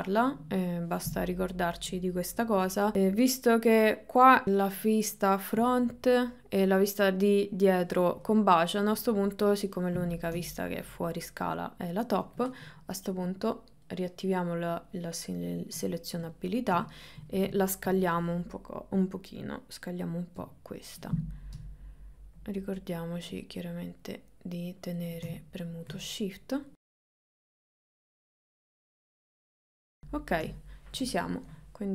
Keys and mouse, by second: 2.4 KP_1, 2.6 KP_1, 2.9 KP_3, 2.9 KP_9, 5.6 KP_1, 9.0 KP_3, 11.3 click, 13.8 click, 14.8 click, 17.2 shift+middle click, 17.7 ctrl+middle click, 20.4 s, 25.4 shift+middle click, 27.0 click, 28.1 s, 29.2 KP_1, 29.6 shift+middle click, 30.0 KP_3, 30.6 shift+middle click.